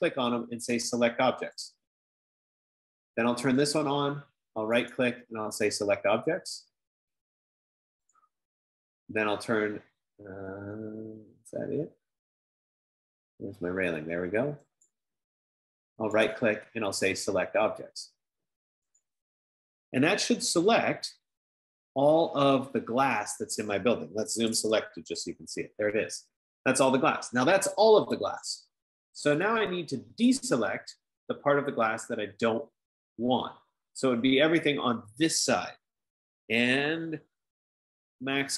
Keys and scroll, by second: 0.7 F15, 25.2-25.9 typing.